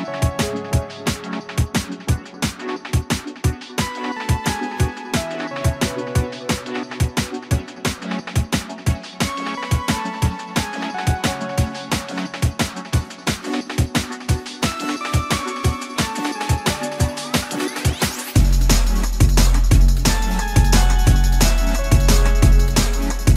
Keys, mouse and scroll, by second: 1.3 ctrl+z, 1.8 space, 5.2 ctrl+g, 9.2 e, 15.1 shift+middle click, 20.9 shift+middle click.